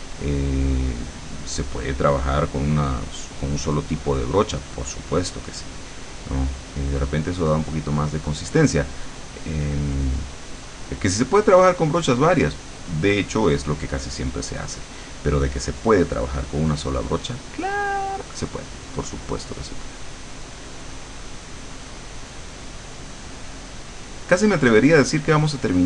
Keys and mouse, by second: 11.6-13.0 drag, 13.2-14.8 drag, 23.9-25.8 drag.